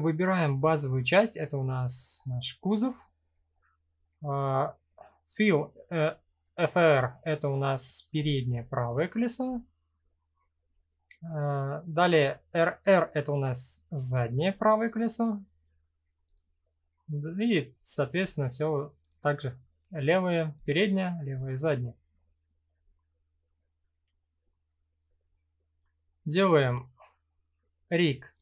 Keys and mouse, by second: 7.7 click, 12.2 click, 15.8 click, 20.1 click, 27.9 click.